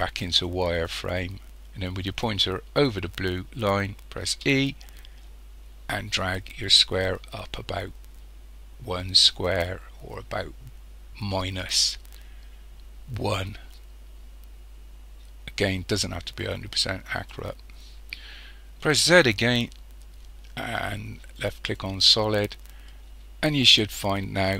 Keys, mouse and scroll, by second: 4.3 e, 17.3 click, 19.0 z, 22.9-24.5 middle drag.